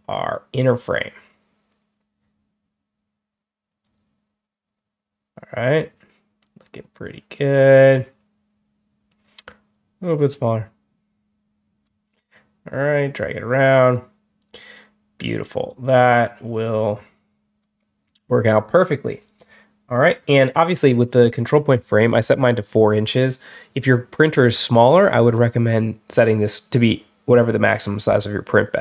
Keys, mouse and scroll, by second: 0.9 click, 3.6 scroll down 1, 12.6-17.5 drag.